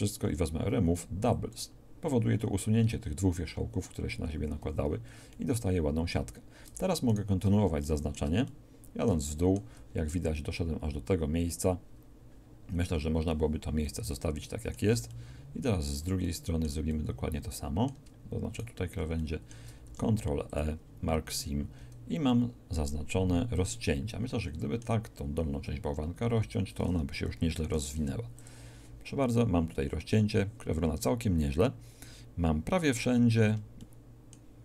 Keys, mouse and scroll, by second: 4.6 a, 7.5 middle click, 8.5 middle click, 13.9 middle click, 19.1 alt+shift+click, 19.9 ctrl+e, 26.2 a, 26.4 a, 27.7 u, 29.1-29.6 scroll down 1.